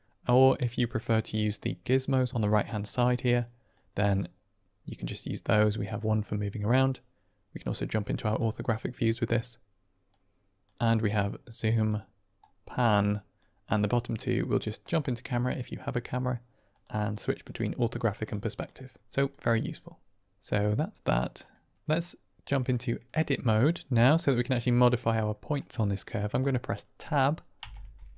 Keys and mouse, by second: 1.3-3.2 drag, 3.7-5.4 drag, 5.9 click, 7.5 click, 8.2 click, 8.9 click, 10.0 click, 11.1 click, 12.5 click, 14.7 click, 16.6 click, 17.0 click, 17.3 click, 17.8 click, 18.1 click, 18.4 click, 19.3-21.4 middle drag, 22.5 middle click, 27.5 Tab.